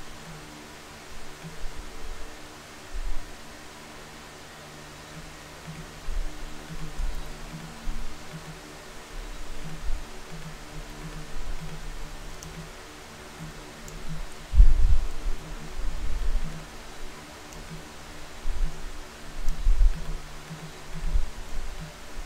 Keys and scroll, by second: 7.2 d, 14.4 Right, 14.7 Right, 15.3 Left.